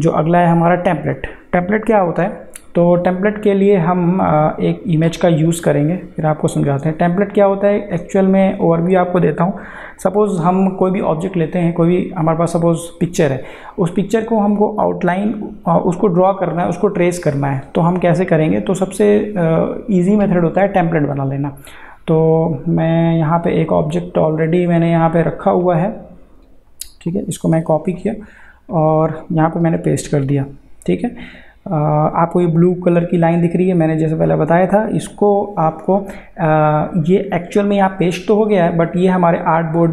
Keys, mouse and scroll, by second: 2.4-10.0 drag, 18.8-22.8 drag, 25.6 click, 27.6 ctrl+c, 28.6 click, 29.6 ctrl+v.